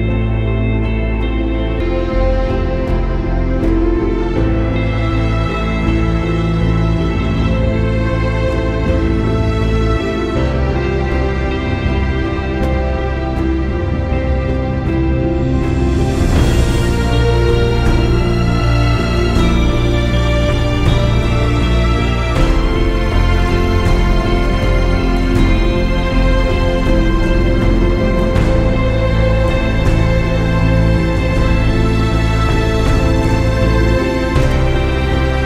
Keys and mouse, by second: 0.0 space, 1.8 ctrl+=, 2.5 space, 2.7 click, 4.5 click, 7.7 click, 13.2 space, 13.3 click, 14.0 click, 18.2 ctrl+z, 19.7 click, 20.4 space, 20.5 click, 20.8 space, 21.8 click, 22.4 click, 23.1 click, 23.5 click, 23.9 click, 24.0 typing, 24.3 click, 25.1 click, 26.8-29.1 drag, 29.5 click, 30.4 space, 30.5 click, 31.8 click, 32.5 shift+click, 34.1 click.